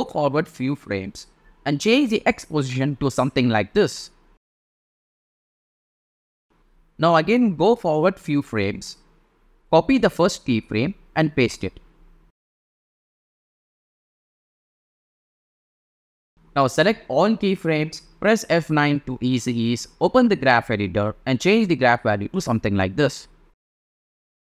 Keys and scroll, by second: 13.0 super+c, 13.3 super+v, 18.5 F9, 23.5 shift+super+z, 23.9 shift+super+z.